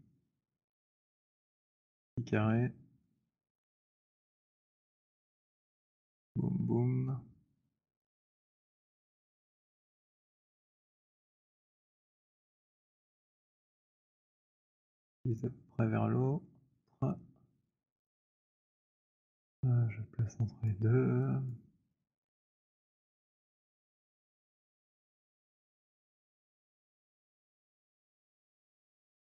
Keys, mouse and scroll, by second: 1.8 click, 2.5-7.5 typing, 4.9 middle click, 7.5 middle click, 8.6 click, 15.2 click, 17.7 click, 20.6 click, 21.4 click, 24.4 click, 24.9-25.5 scroll, 25.8 alt+middle click, 26.0-27.6 scroll, 27.6 click.